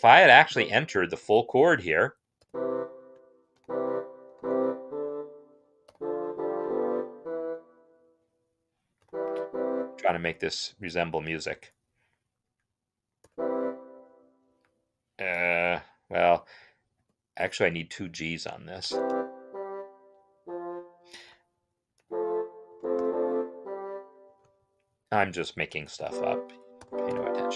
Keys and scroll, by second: 2.3 shift+e, 3.4 shift+g, 4.1 shift+c, 5.7 Right, 9.2 Right, 13.0 shift+e, 16.8 ctrl+z, 18.5 shift+g, 19.2 ctrl+Down, 20.1 Right, 23.3 shift+c, 26.6 Right, 26.9 shift+b.